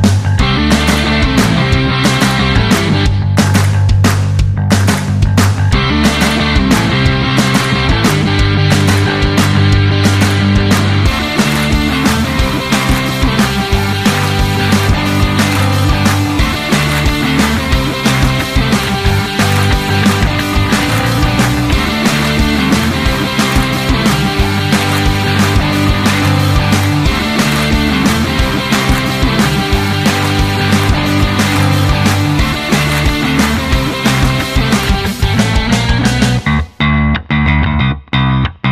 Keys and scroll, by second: 22.7-24.5 typing, 24.9 Return.